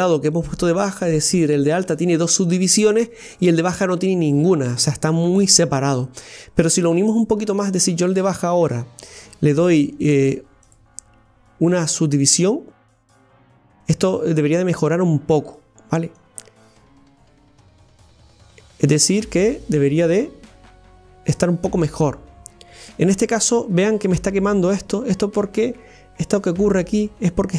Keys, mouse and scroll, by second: 8.1 click, 12.4-13.4 drag, 13.4-13.7 scroll up 1, 13.8-16.4 middle drag, 16.4-21.5 drag, 21.8-23.6 middle drag, 23.6-26.0 scroll up 2.